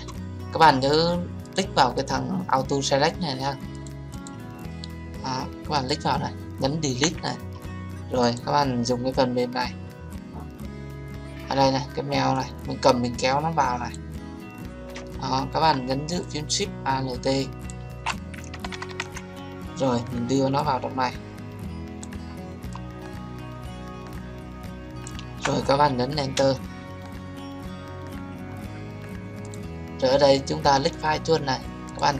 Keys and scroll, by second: 6.9 Delete, 26.3 Return.